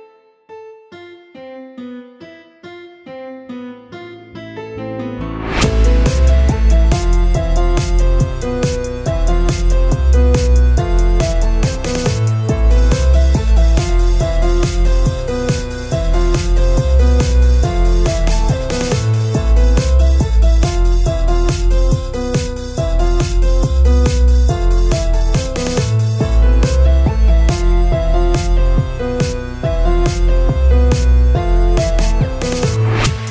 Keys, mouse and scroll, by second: 0.3-1.4 right drag, 1.4-3.2 middle drag, 3.2 KP_1, 4.1 Tab, 4.6 Tab, 6.2 a, 6.7 g, 8.2 Tab, 9.9 click, 10.3 Tab, 10.6 a, 10.9 g, 13.1 Tab, 13.3-13.9 scroll down 2, 13.9 KP_7, 15.1-15.9 scroll up 2, 15.9 s, 18.0-18.4 scroll up 5, 18.2-18.6 shift+middle drag, 18.6 scroll down 2, 18.9-27.8 typing, 24.2 shift+click, 26.4 click, 28.8 click, 29.0 shift+click, 29.3 shift+click, 29.5 shift+click, 30.0 shift+click, 30.6 shift+d, 30.8 g, 31.4 r, 31.9 g, 33.2-33.3 typing.